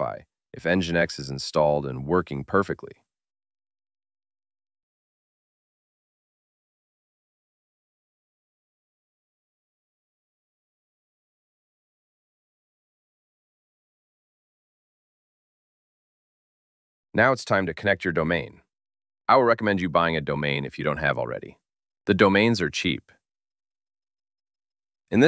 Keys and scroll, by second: 8.8 ctrl+c.